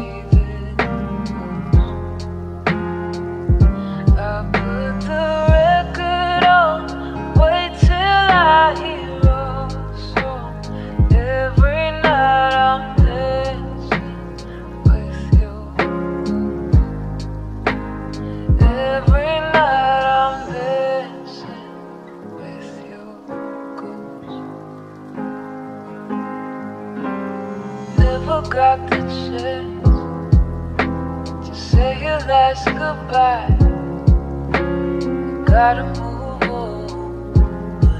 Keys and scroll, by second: 14.2 s, 18.9 ctrl+z, 21.9 ctrl+z, 37.4 q.